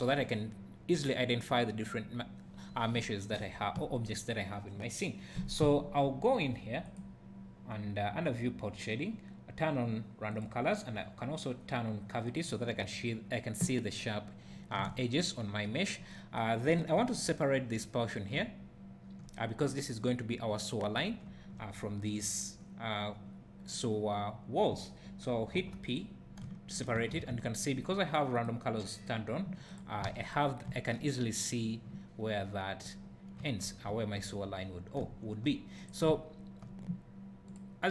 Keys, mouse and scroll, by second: 6.9-15.7 drag, 14.9 `, 18.6-21.0 drag, 25.5 p, 26.4-29.8 drag, 27.2 alt+a, 27.3 Tab, 30.1 alt+a, 30.2 click, 35.8 click, 36.1 `.